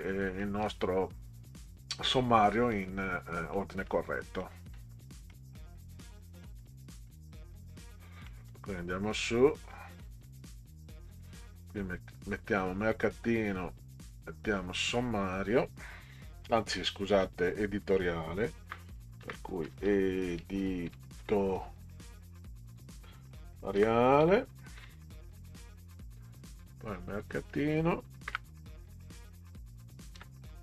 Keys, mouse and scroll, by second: 0.4 middle click, 2.7 scroll up 2, 2.7 middle click, 3.5 middle click, 3.8 scroll down 2, 4.4 middle click, 5.3 middle click, 6.2 middle click, 7.1 middle click, 8.3 middle click, 9.2 middle click, 9.7 scroll down 2, 10.3 middle click, 10.4-10.9 scroll down 2, 10.9-11.9 scroll up 2, 12.8 click, 13.0 click, 14.1-15.3 drag, 19.2 Caps_Lock, 19.4-21.2 typing, 22.8-24.8 typing, 27.1 click, 28.3 Return, 30.1-30.6 typing.